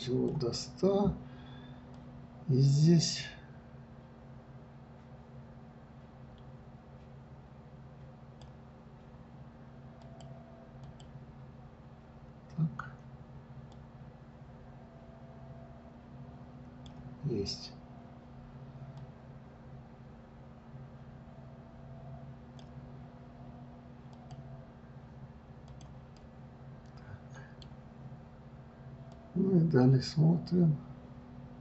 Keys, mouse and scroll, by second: 1.9-4.9 drag, 10.0-12.3 drag, 13.7-16.7 drag, 18.9-22.0 drag, 24.1 click, 25.7 click, 26.1-29.1 middle drag, 29.1-31.6 drag.